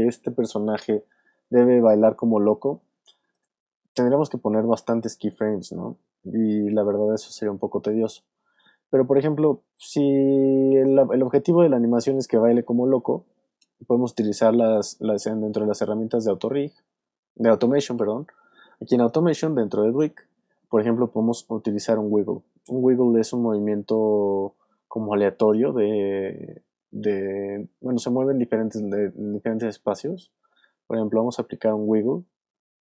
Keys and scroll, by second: 1.4 space.